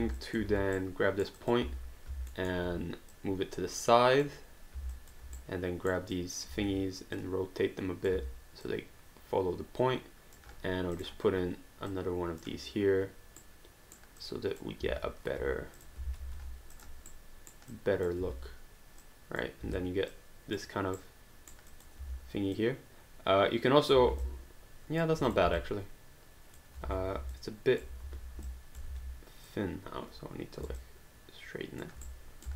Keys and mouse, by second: 0.2 alt+click, 0.5 q, 0.8 right click, 1.4 click, 1.6 w, 2.3 alt+middle click, 3.1 click, 5.0 alt+click, 5.4 right click, 6.2 click, 6.5 e, 7.2 click, 8.1 w, 8.7 click, 11.0 click, 13.4 right click, 14.2 click, 14.8 e, 15.4 q, 15.8 click, 16.1 alt+d, 16.4 q, 16.7 click, 17.1 right click, 17.7 click, 18.2 e, 19.0 click, 19.6 w, 20.1 click, 21.0 right click, 21.7 click, 22.0 w, 22.6 click, 24.1 alt+d, 24.2 alt+click, 25.3 click, 25.7 alt+click, 27.4 alt+click, 28.1 e, 28.8 click, 29.3 r, 29.5 click, 30.6 alt+click, 32.1 right click.